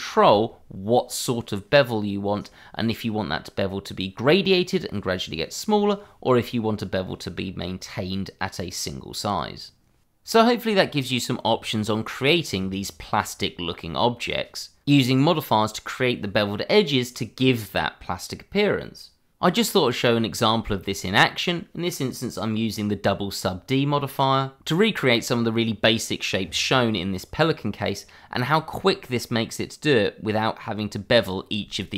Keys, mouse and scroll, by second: 0.0 shift+middle click, 0.1 middle click, 0.3-0.8 shift+scroll up 1, 0.8 shift+middle click, 1.5 middle click, 2.3-2.9 scroll up 1, 2.9-3.3 scroll down 1, 3.3 shift+middle click.